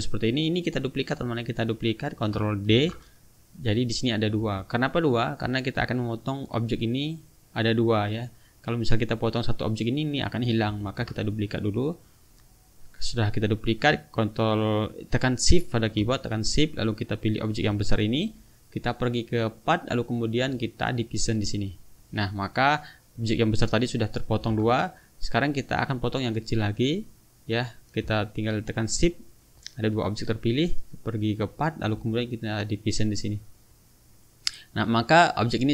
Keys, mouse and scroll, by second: 0.3 click, 2.7 ctrl+d, 3.4-4.5 drag, 4.6 ctrl+z, 8.7-9.4 drag, 10.8 ctrl+z, 11.4 ctrl+click, 12.1 click, 17.4 shift+click, 19.6 click, 21.3 click, 22.7 click, 23.2 click, 23.7 click, 24.5 ctrl+z, 25.4 click, 29.1 shift+click, 31.5 click, 32.8 click, 33.7 click, 34.4 click, 34.9 click.